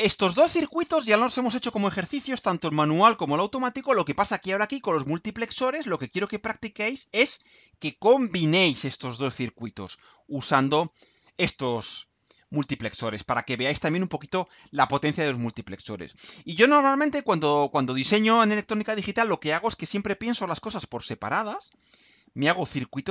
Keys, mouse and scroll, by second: 5.9 click, 7.0 click, 12.8 click.